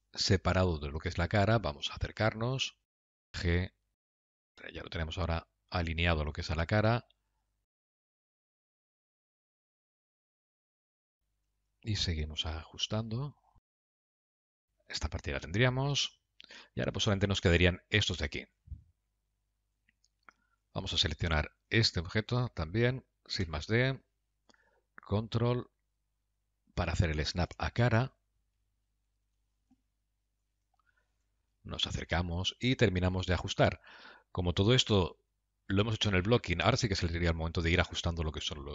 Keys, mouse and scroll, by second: 1.3 click, 2.0 KP_Decimal, 2.7 scroll down 3, 3.2 middle click, 4.1 g, 4.9 middle click, 7.5 g, 8.1 g, 8.8 middle click, 9.2 g, 9.8 g, 10.3 scroll down 2, 10.4 middle click, 11.4 click, 11.9 Tab, 13.0 click, 13.2 g, 14.2-15.1 scroll down 8, 14.6 Tab, 15.4 middle click, 16.6 shift+middle click, 17.3 scroll up 2, 17.7 scroll down 1, 18.6 shift+middle click, 19.3 middle click, 21.1 Tab, 21.2 click, 21.9 Tab, 22.1 click, 23.9 shift+d, 32.0 KP_Decimal, 32.7-34.1 scroll down 4, 33.1 middle click.